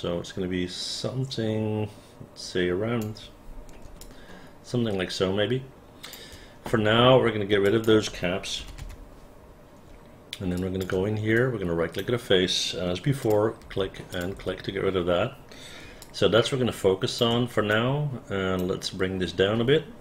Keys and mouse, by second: 4.1-6.2 alt+drag, 7.8 click, 8.7 KP_0, 8.9 Return, 10.7 alt+click, 11.5 right click, 13.3 click, 13.8 Delete, 14.2 click, 14.5 Delete, 16.1-17.3 alt+drag, 17.8 alt+right click.